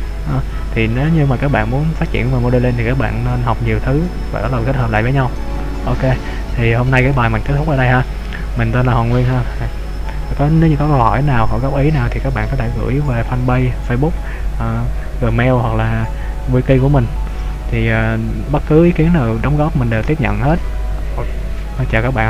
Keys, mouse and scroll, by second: 7.1 scroll up 1, 7.2 middle click, 9.3 scroll up 1.